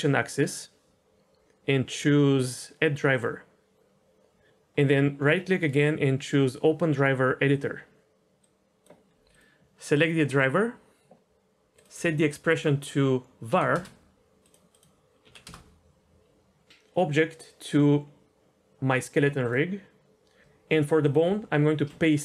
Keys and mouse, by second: 0.5-4.3 drag, 5.5-7.6 right drag.